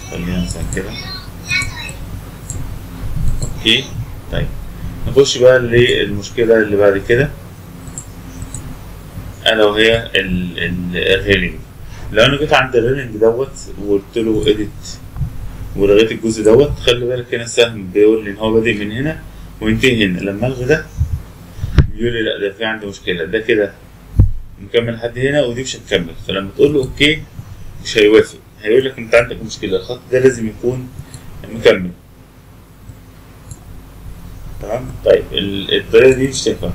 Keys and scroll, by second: 20.9 Delete.